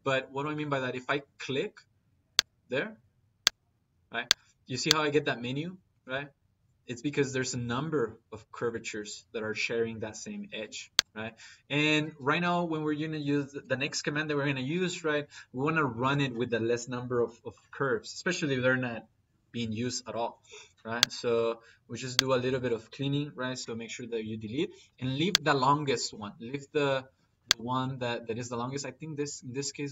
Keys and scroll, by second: 23.5 Delete.